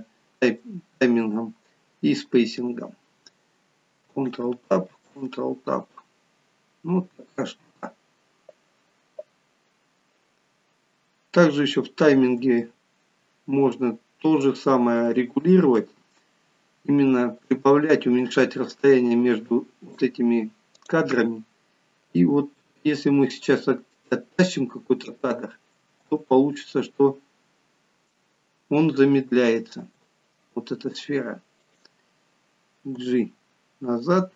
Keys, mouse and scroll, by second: 4.3 ctrl+Tab, 5.0 ctrl+Tab, 10.7 scroll up 3, 12.7 shift+middle click, 15.8 middle click, 17.5 click, 18.3 click, 22.1 g, 26.0 space, 29.9 space, 31.8 click, 33.0 g.